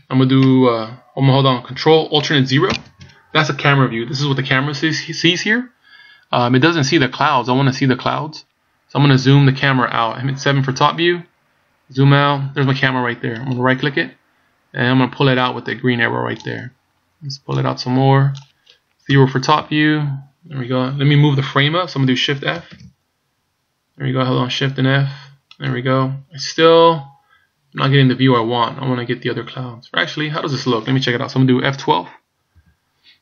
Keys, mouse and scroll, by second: 2.7 ctrl+alt+KP_0, 10.6 KP_7, 11.7-13.5 scroll down 2, 13.5 right click, 13.9 scroll down 2, 15.5 click, 16.7 scroll down 1, 17.5 click, 19.1 KP_0, 22.7 shift+f.